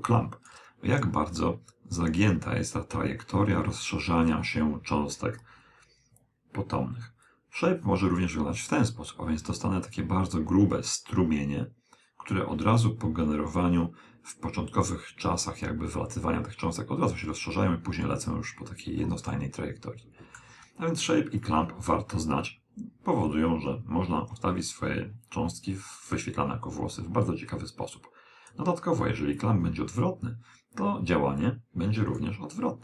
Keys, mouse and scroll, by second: 7.3 click, 19.4-21.1 middle drag, 21.5 click, 29.4 click.